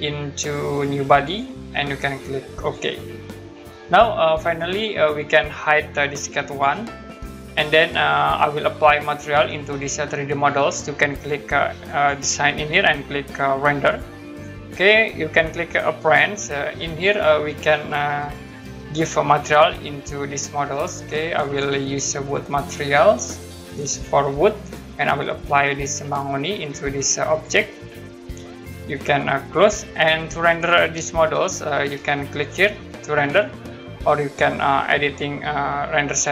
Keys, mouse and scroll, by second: 3.6 middle click, 4.6 click, 6.5 click, 9.1 middle click, 11.9 click, 13.8 click, 16.0 click, 21.4 click, 22.6 scroll down 1, 25.0 scroll up 1, 26.0 click, 26.2 Home, 29.5 click, 31.1 middle click, 31.3 Home, 36.0 click.